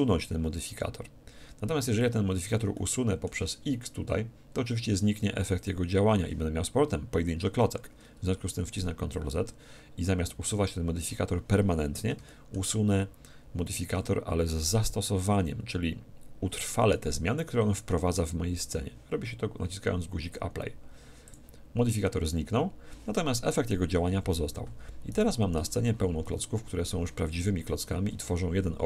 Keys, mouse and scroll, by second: 2.0-4.7 middle drag, 5.6-7.3 drag, 8.8 ctrl+z, 12.2-14.8 middle drag, 21.2-23.2 drag, 25.1-26.8 right drag, 25.6 Tab, 26.2 a, 27.3 a.